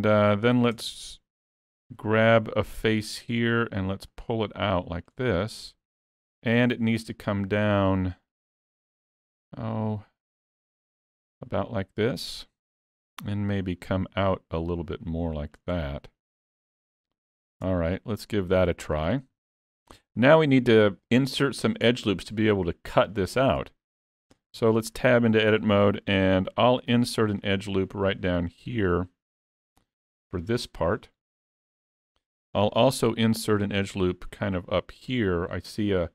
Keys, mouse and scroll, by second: 0.2 middle click, 0.8 Tab, 1.5 3, 2.3 click, 2.8 middle click, 4.2 click, 5.3 middle click, 6.4 middle click, 8.3 click, 12.3 middle click, 13.6 click, 15.8 middle click, 17.7 Tab, 18.0 middle click, 19.1 scroll up 2, 19.4 shift+middle click, 20.0 middle click, 23.5 middle click, 24.5 Tab, 24.8 middle click, 26.6 ctrl+r, 35.9 scroll up 3.